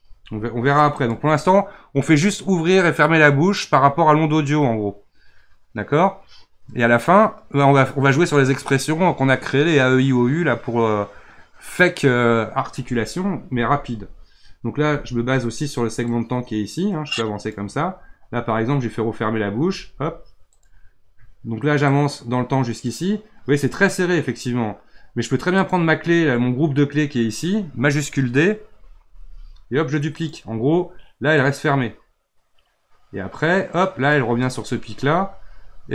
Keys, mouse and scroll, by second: 0.0 r, 16.1-19.6 drag, 19.6 r, 21.9-24.9 drag, 25.6 click, 29.1 shift+d, 31.4-35.4 drag.